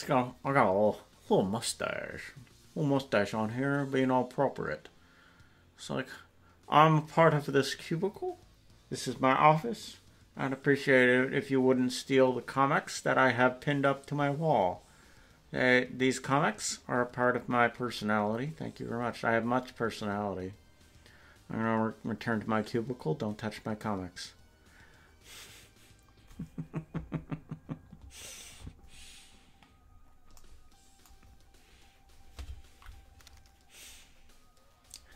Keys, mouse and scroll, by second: 29.7-35.1 scroll up 6.